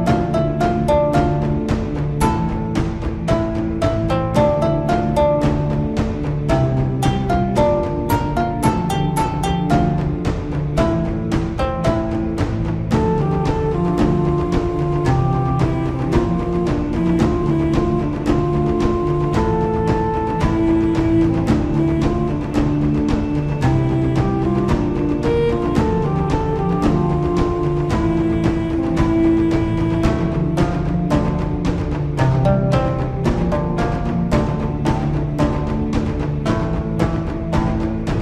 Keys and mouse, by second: 0.2 middle click, 1.8-4.0 middle drag, 5.6 middle click, 11.3-12.4 middle drag, 13.9 KP_7, 15.4-17.0 drag, 20.2 ctrl+KP_Add, 22.4 ctrl+KP_Add, 22.6 middle click, 25.8-27.5 middle drag.